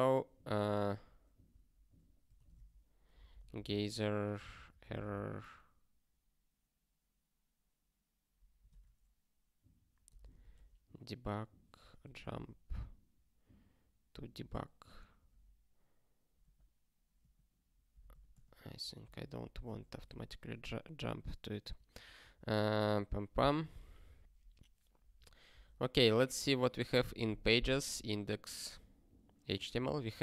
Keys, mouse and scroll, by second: 0.9 super+o, 1.4 ctrl+p, 15.8 m, 17.2 =, 18.3 l, 19.0 ctrl+n, 19.3 ctrl+p, 19.9 ctrl+f, 22.9 ctrl+g, 29.0 scroll down 1, 30.0-30.2 scroll down 2.